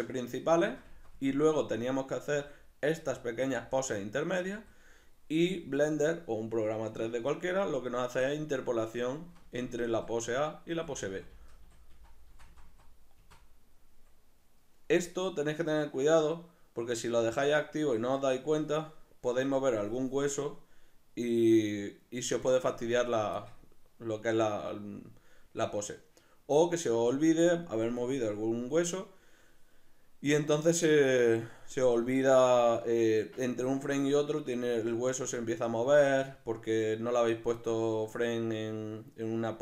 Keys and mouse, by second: 0.5 Right, 2.3 Left, 9.2 Right, 9.9 Right, 10.7 Left, 11.3 Left, 11.9 Right, 13.2 Right, 17.3-31.9 drag, 31.9 right click, 32.6 right click, 33.3 right click.